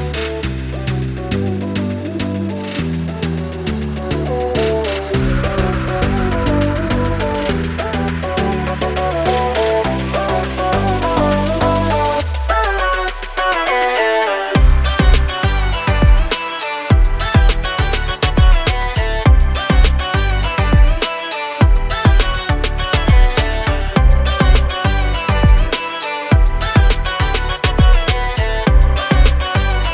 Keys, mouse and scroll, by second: 2.1 scroll down 1, 5.8 alt+Num_Lock, 6.0-7.1 alt+scroll down 2, 7.1 click, 9.4 scroll up 1, 10.8 click.